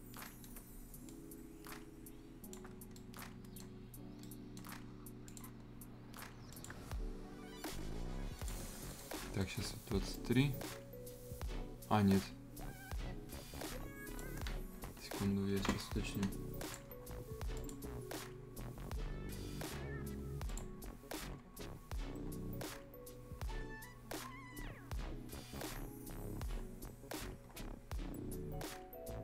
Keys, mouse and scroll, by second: 0.2 right click, 1.1-2.7 drag, 2.7 shift+scroll up 1, 2.9 right click, 5.2 click, 8.4 shift+click, 8.7 scroll down 1, 8.9 right click, 9.1-10.1 scroll up 2, 9.4 right click, 10.1-16.6 drag, 16.9-17.5 scroll up 1, 17.5 click, 18.3-20.1 scroll up 1, 20.4 click, 21.1-22.2 scroll up 1, 23.0-24.9 scroll down 1, 25.5-25.9 scroll up 1.